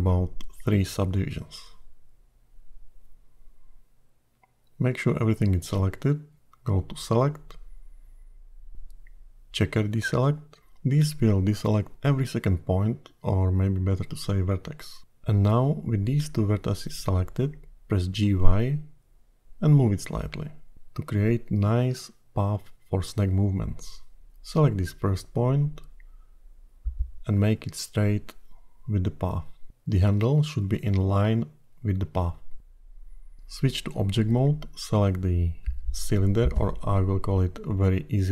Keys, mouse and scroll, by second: 1.4 click, 2.1 click, 5.3 a, 7.7 click, 17.7 g, 23.2-24.2 scroll up 3, 24.2 click, 25.1-25.6 scroll up 2, 27.5 r, 31.6-32.7 scroll down 1, 32.7-33.9 scroll down 4, 33.9 Tab, 35.0 click, 37.6-38.0 scroll up 2, 38.0 Tab.